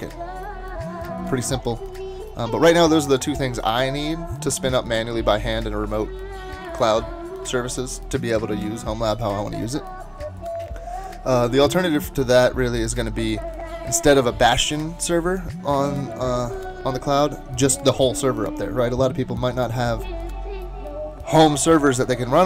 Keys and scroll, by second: 18.3 typing.